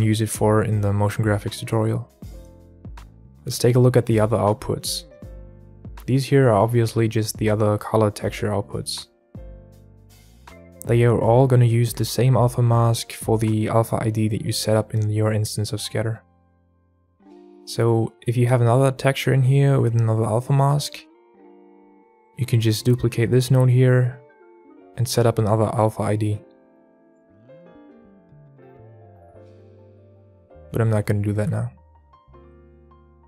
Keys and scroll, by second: 18.5 alt+a, 20.1 alt+a, 21.4 alt+a, 22.9 ctrl+z, 22.9 shift+d, 26.9 KP_2, 27.0 KP_Enter, 29.5 x, 31.8 alt+a.